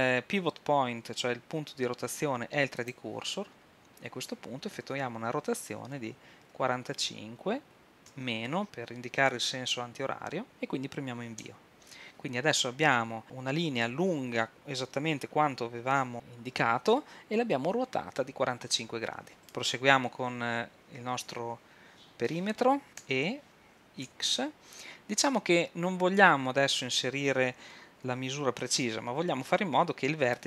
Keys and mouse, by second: 4.9 r, 19.4 Escape, 19.4 l, 23.0 e.